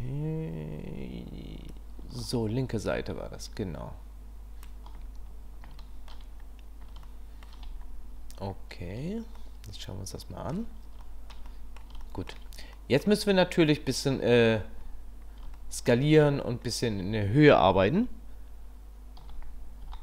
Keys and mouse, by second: 1.8 click, 6.0 shift+click, 7.1-7.6 shift+middle drag, 9.4-10.6 middle drag, 11.1 shift+middle drag, 11.5-11.9 middle drag, 12.0-12.4 shift+middle drag, 12.7 middle click, 15.6 shift+middle click, 19.2 s.